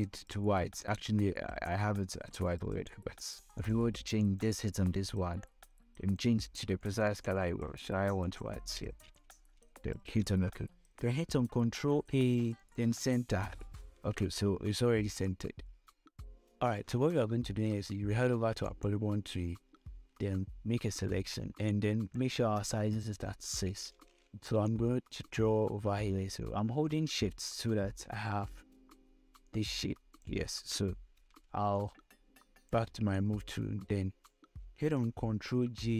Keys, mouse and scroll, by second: 1.1-8.6 drag, 11.8 ctrl+a, 12.8 click, 14.0 ctrl+d, 14.7-15.1 scroll up 2, 15.1-15.5 scroll down 2, 15.8 scroll down 1, 16.1 click, 19.3 click, 19.9 click, 20.3 scroll up 1, 22.7 click, 25.3-31.6 drag, 31.6 v, 32.4-35.7 drag, 35.7 ctrl+j.